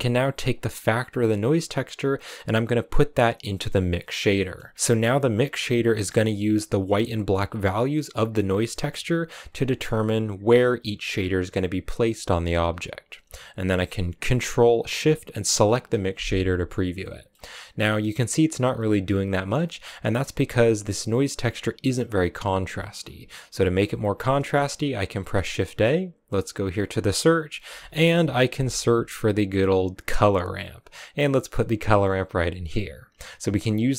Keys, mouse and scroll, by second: 0.2 click, 4.2 middle click, 5.1-6.2 drag, 7.5-8.7 drag, 9.1-9.5 scroll up 2, 9.5 middle click, 9.7-10.0 scroll up 1, 11.0-12.6 scroll down 4, 12.6-14.1 scroll down 3, 15.5 ctrl+shift+click, 16.9 middle click, 17.2-17.7 scroll up 4, 17.7 middle click, 18.6 scroll down 2, 18.8 middle click, 19.4-20.1 scroll down 1, 20.1-21.6 drag, 21.7-25.1 drag, 25.1 shift+a, 31.7 click.